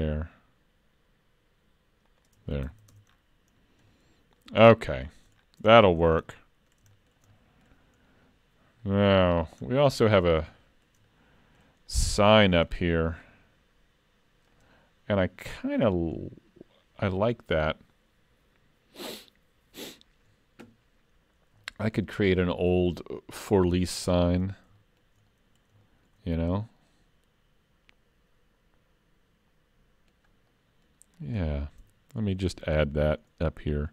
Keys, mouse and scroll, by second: 2.6 alt+a, 2.9 Tab, 3.2-3.9 scroll down 7, 3.9 middle click, 4.6 scroll down 2, 5.0 shift+middle click, 5.4 scroll down 2, 5.7 shift+middle click, 6.3 middle click, 7.0 shift+middle click, 7.4 middle click, 8.0-8.4 scroll down 2, 8.8 middle click, 9.6-10.0 scroll down 2, 10.6 shift+middle click, 11.1 middle click, 11.9 middle click, 12.2 shift+middle click, 13.6-14.5 scroll down 5, 14.5 click, 15.6-16.2 scroll down 2, 16.2-17.5 scroll up 1, 17.5-18.6 scroll up 1, 21.2-21.6 scroll up 4, 21.6 shift+middle click, 22.1 scroll up 2, 22.4 shift+middle click, 23.9 middle click, 24.4 scroll up 3, 24.8 shift+middle click, 25.3 middle click, 25.9 shift+middle click, 26.3-26.8 scroll up 2, 26.8 middle click, 30.5 middle click, 31.8 Tab, 32.2 scroll up 2, 32.6 shift+middle click, 33.3 middle click.